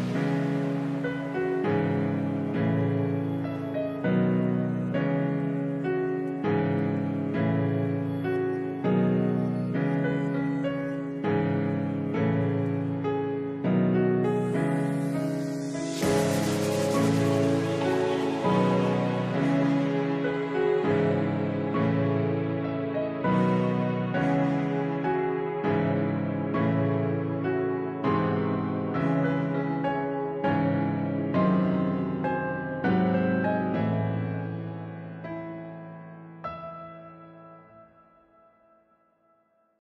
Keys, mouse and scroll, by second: 2.0-4.0 middle drag, 4.0 i, 12.6-14.7 middle drag, 14.7 click, 16.9 ctrl+r, 19.1 shift+click, 21.2 e, 23.3 middle click, 25.4 click, 27.5 Tab, 29.6-31.6 scroll up 1, 31.6 click, 33.7-35.7 middle drag, 35.7 c, 39.5 c.